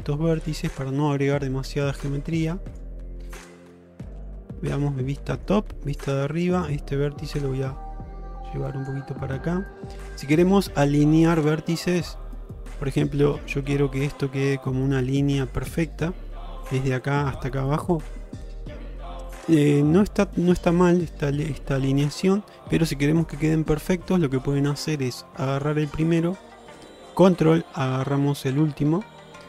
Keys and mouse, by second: 0.7 middle click, 2.2 g, 3.1 middle click, 4.5 middle click, 5.9 shift+middle click, 7.3-8.9 drag, 10.2-11.3 middle drag, 12.3-13.5 middle drag, 24.8 shift+middle click, 25.6 click.